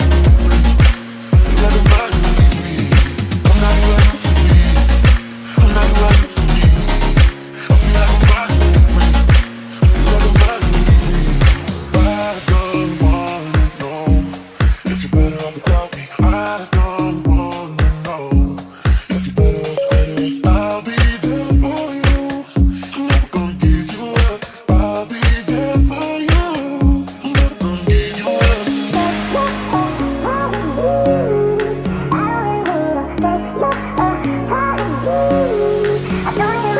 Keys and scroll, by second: 16.4 ctrl+z, 16.9 ctrl+z, 17.5 ctrl+z, 18.1 w, 19.0 ctrl+z, 20.1 ctrl+z, 20.2 space, 20.3 Escape, 22.8 e, 23.7 w, 24.9-25.8 typing, 27.4-31.0 typing, 34.7 ctrl+s.